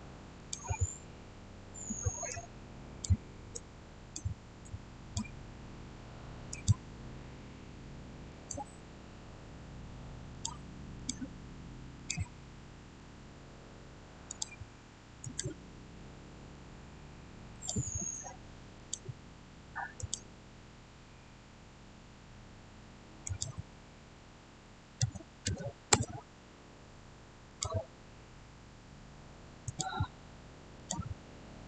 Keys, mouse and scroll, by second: 1.1 scroll up 1, 2.2-6.5 drag, 7.0-7.8 scroll down 1, 8.2 click, 10.2 click, 12.3 scroll down 1, 12.4-14.2 middle drag, 14.2 click, 15.9-17.4 middle drag, 17.4 click, 23.1 click, 24.7-25.8 typing, 27.4 click, 29.5 click.